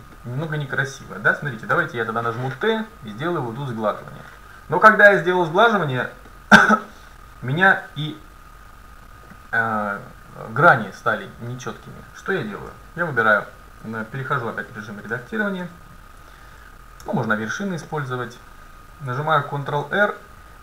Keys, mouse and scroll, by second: 1.2 click, 1.8 t, 3.6-5.5 drag, 5.3 t, 6.3 middle click, 6.8-8.1 scroll down 1, 8.1 middle click, 11.5 middle click, 12.7 Tab, 13.4 middle click, 14.8 middle click, 15.7 a, 17.1 ctrl+Tab, 19.7 ctrl+r.